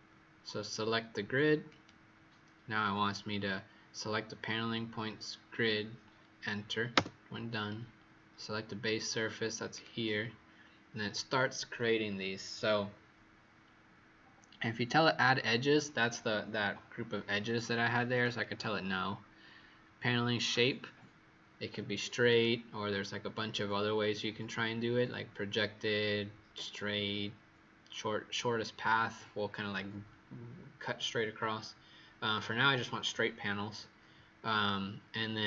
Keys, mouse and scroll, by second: 6.9 Return, 9.6 click.